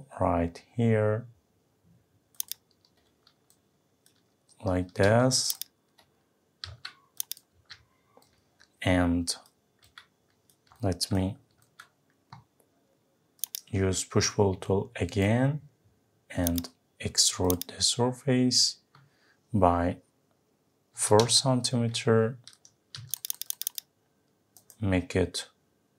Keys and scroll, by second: 6.6 Delete, 21.2 Return.